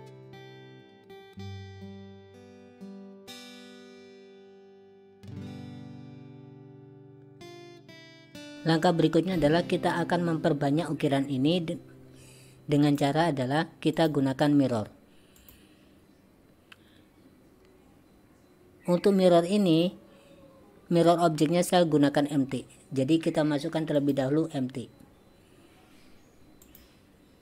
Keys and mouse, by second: 0.2 click, 1.6 click, 2.7 alt+s, 5.4 alt+s, 6.1 click, 6.8 g, 13.0 click, 14.1-15.6 drag, 24.0-26.8 drag.